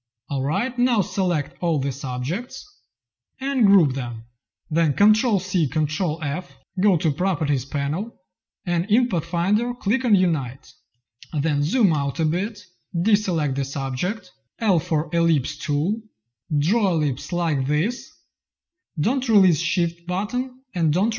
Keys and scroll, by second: 3.5 ctrl+g, 5.2 ctrl+c, 6.3 ctrl+f, 11.1 z, 11.9 space, 14.0 v, 14.5 l.